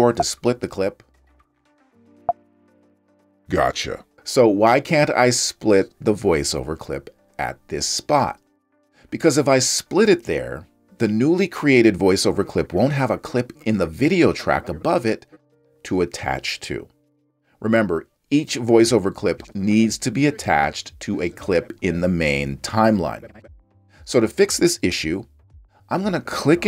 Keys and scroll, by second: 0.1 super+b, 2.2 super+b.